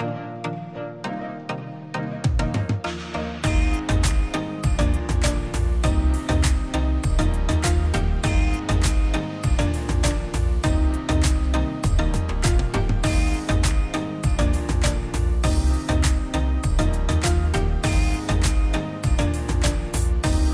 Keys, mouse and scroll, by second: 7.7-9.1 typing.